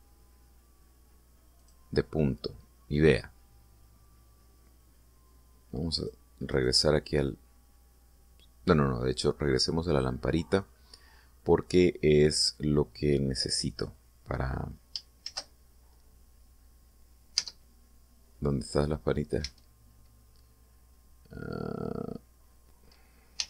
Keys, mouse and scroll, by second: 2.2 click, 6.7 click, 7.2 right click, 15.9 shift+z, 18.1 Tab, 19.2-20.2 middle drag, 20.1 Tab.